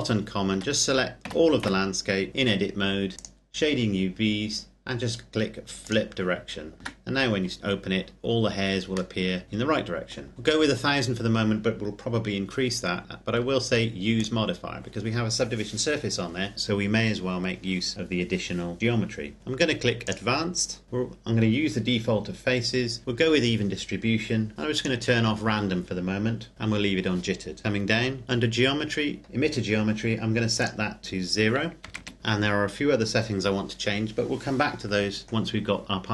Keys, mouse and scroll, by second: 0.5 Tab, 1.2 a, 1.6 a, 3.1 click, 5.9 click, 6.8 Tab, 7.8-9.2 scroll down 1, 9.2 middle click, 14.2 click, 20.1 click, 24.8 click, 27.6-28.8 scroll down 1, 30.6 click, 31.8 KP_0, 31.9 KP_Enter, 35.4-36.0 scroll down 1, 36.0-36.1 scroll up 1.